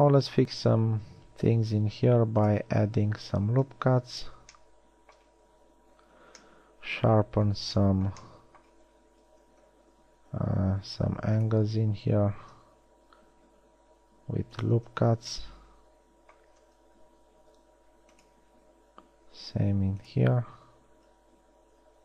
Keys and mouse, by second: 2.1 ctrl+r, 10.0 z, 11.3 ctrl+r, 15.3 z, 16.9 z, 17.9 ctrl+r, 21.3 z.